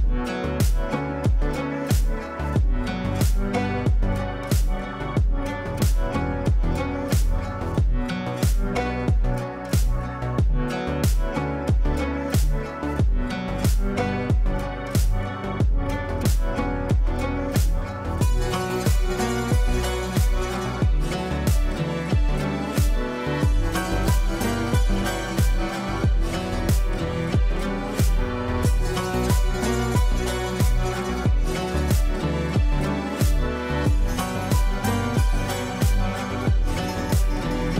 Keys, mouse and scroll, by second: 0.7 click, 2.5-3.4 typing, 4.6-7.0 typing, 7.3 ctrl+space, 8.6 click, 11.1 click, 12.6 shift+click, 13.0-13.9 typing, 14.1 F2, 14.4 click, 21.4 F3, 22.1 F2, 22.4-23.7 drag, 25.8 shift+c, 26.3 shift+n, 27.3-28.2 typing, 29.2 shift+c, 29.8 shift+t, 29.9 shift+space, 31.2 shift+u, 31.6 shift+s, 36.4 space.